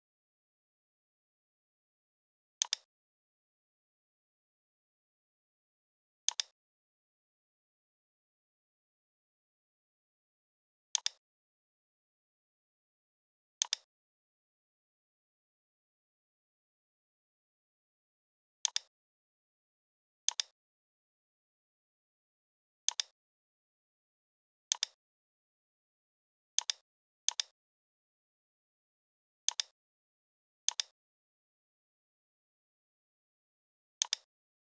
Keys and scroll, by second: 11.8 i, 14.4 shift+x, 15.7 p, 17.9 v, 21.2 a.